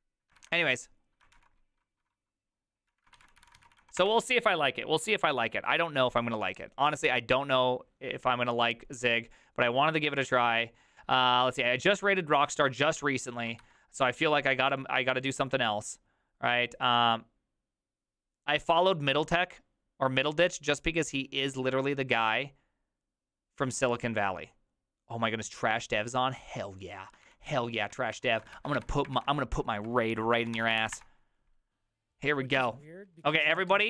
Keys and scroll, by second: 0.4 ctrl+w, 1.3 ctrl+t, 2.6-4.3 typing, 13.6 alt+f, 27.2 ctrl+l, 27.9 Right, 28.2 ctrl+shift+Left, 28.5 ctrl+c, 28.8 alt+f, 29.1 alt+l, 29.6-31.0 typing.